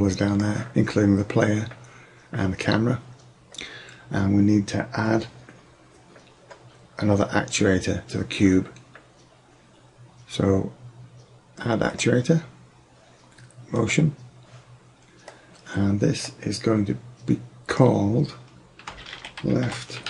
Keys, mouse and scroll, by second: 12.0-14.0 drag, 14.0-15.3 middle drag, 15.3 drag, 15.5-16.9 middle drag, 15.5-16.4 scroll down 1, 16.4-16.9 scroll down 1.